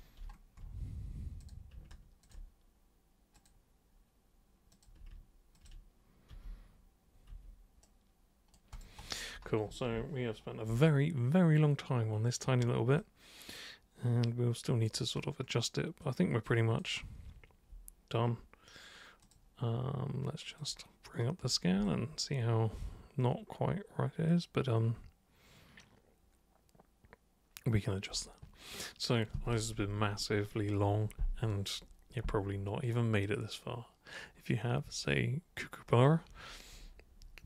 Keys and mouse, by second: 1.4 super+click, 2.3 ctrl+shift+super+click, 3.4 super+click, 4.8 super+click, 5.6 ctrl+shift+super+click, 6.3 super+g, 7.3 super+3, 7.9 super+right click, 8.8 super+click, 10.9-12.4 alt+super+drag, 13.0-14.9 alt+super+drag, 16.0 alt+super+click, 19.2 super+click, 20.6 super+click, 21.8-28.1 alt+super+drag.